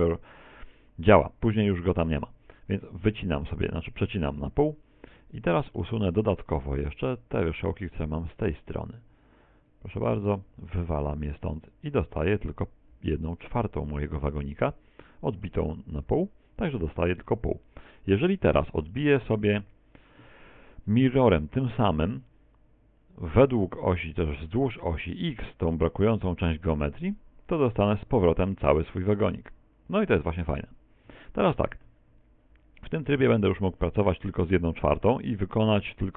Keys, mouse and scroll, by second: 5.2 middle click, 6.5 right click, 7.2 shift+right click, 7.6 shift+right click, 8.4 shift+right click, 8.7 shift+right click, 9.3 shift+right click, 9.7 shift+right click, 9.9 shift+right click, 10.5 x, 12.3 middle click, 18.8 middle click, 19.9 right click, 27.7 click, 30.5 Tab, 31.1 Tab, 31.5 a, 31.9 a, 34.4 middle click, 35.4 middle click.